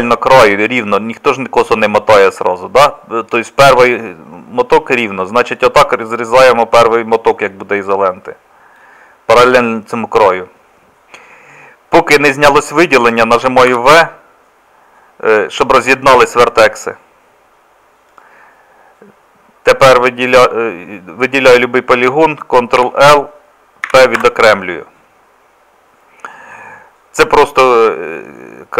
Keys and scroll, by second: 13.7 v, 22.8 ctrl+l, 23.9 p.